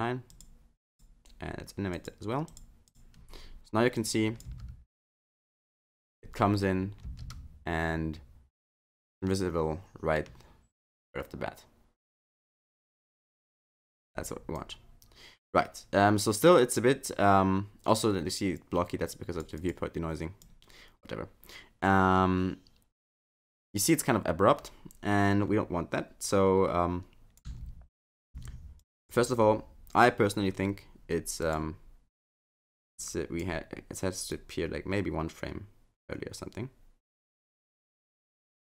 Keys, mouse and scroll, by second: 0.3 click, 1.0 click, 1.9 click, 2.5 click, 2.9 click, 4.0 click, 4.5 space, 5.5 space, 7.1 space, 13.9 space, 14.6 click, 20.2 click, 20.5 click, 27.5 space, 28.3 space, 28.8 click, 31.4 click, 32.9 click, 34.3 click.